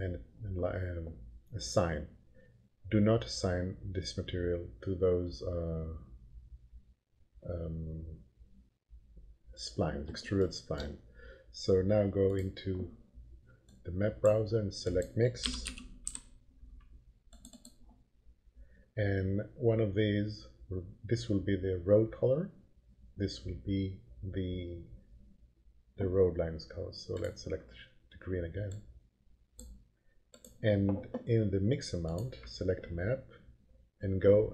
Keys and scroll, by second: 15.1-16.5 typing.